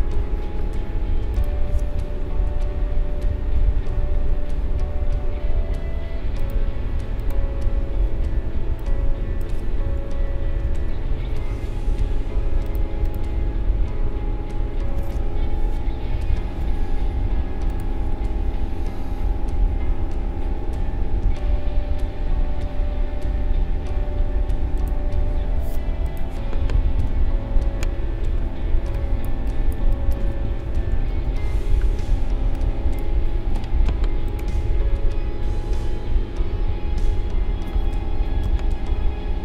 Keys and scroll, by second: 2.4 ctrl+-, 8.4 space, 10.3 ctrl+-, 27.1 ctrl+=, 28.3 space, 30.9 ctrl+=, 31.9 space, 38.4 ctrl+c.